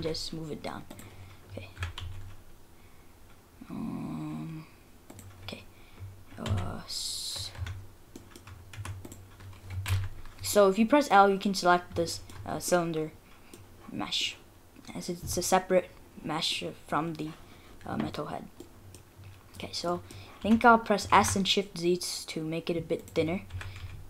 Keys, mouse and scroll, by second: 1.2-1.8 scroll down 7, 1.8 g, 5.4-5.9 scroll up 1, 5.9 scroll down 1, 6.0 scroll down 1, 6.5 a, 6.6-7.3 scroll up 3, 7.6 Tab, 7.8-8.5 scroll up 3, 8.2 middle click, 8.7 Tab, 9.1 click, 9.9 l, 10.6 middle click, 11.8-12.1 scroll down 2, 12.1 shift+middle click, 12.7 middle click, 12.8 middle click, 14.2 middle click, 15.6 middle click, 16.9 scroll down 2, 17.9-18.4 scroll up 5, 18.6 middle click, 19.2-20.2 scroll down 5, 19.9 middle click, 20.4 s, 23.5 g.